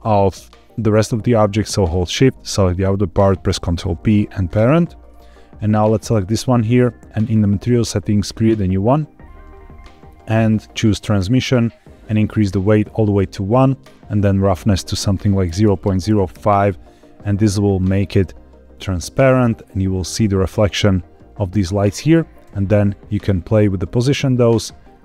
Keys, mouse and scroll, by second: 1.9 shift+click, 3.4 ctrl+p, 5.7 click, 7.1 click, 8.2 click, 9.1-10.2 scroll down 2, 10.2 click, 11.1-12.4 drag, 12.9-14.2 scroll up 1, 14.2-16.3 drag, 14.2-16.1 scroll up 1, 20.6-21.7 scroll down 2, 21.7 click, 22.4 g, 24.2 click, 24.8-25.0 scroll up 2.